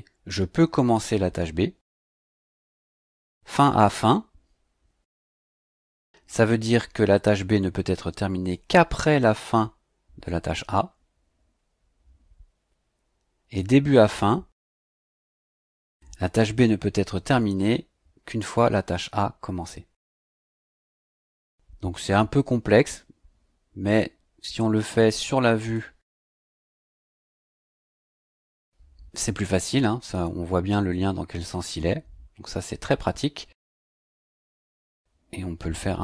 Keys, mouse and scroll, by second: 2.4-5.1 scroll down 4, 11.9 scroll down 2, 12.5-12.9 scroll down 2, 25.6 click, 28.5 click, 34.6-36.0 drag.